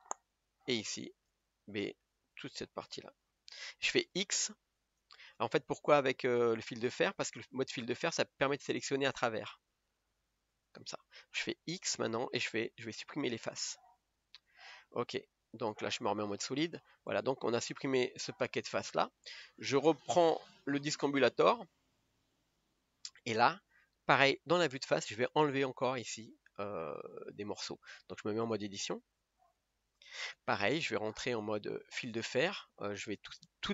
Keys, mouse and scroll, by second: 0.0 b, 3.3 b, 5.6 scroll down 1, 6.6 click, 6.8 click, 7.4-10.5 middle drag, 10.5 KP_1, 13.8 x, 14.5 Tab, 16.0 click, 16.5 scroll up 1, 16.9-18.4 middle drag, 18.4 scroll down 2, 20.2-21.3 drag, 22.1 click, 22.6-24.1 middle drag, 24.1 KP_1, 29.9-33.7 drag.